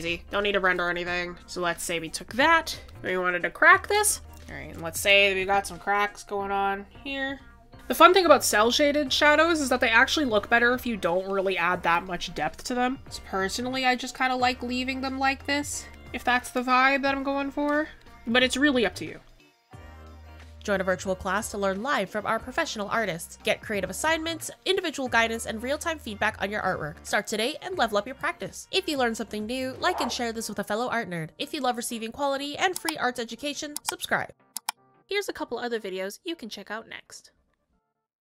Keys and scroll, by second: 1.4 space, 7.9 ctrl+s, 8.5 ctrl+z, 10.6 ctrl+z, 14.4 ctrl+z, 15.2 ctrl+z, 15.5 ctrl+s, 16.8 ctrl+z, 18.6 space, 20.2 ctrl+s.